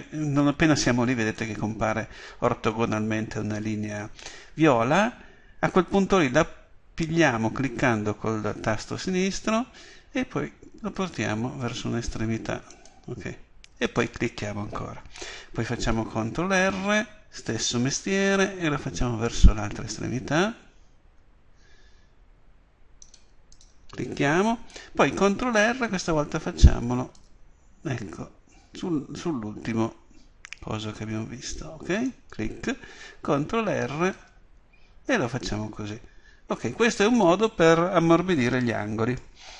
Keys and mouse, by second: 13.9-16.6 drag, 16.6 ctrl+r, 23.6-25.6 drag, 25.6 ctrl+r, 32.1-34.1 drag, 33.3 ctrl+r, 37.2-39.5 drag.